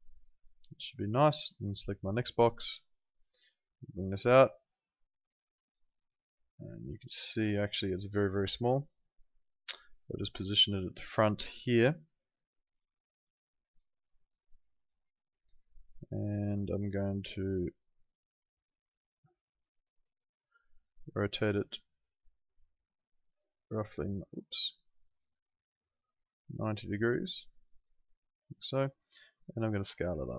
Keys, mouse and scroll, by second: 2.0 click, 11.1 click, 19.1 click.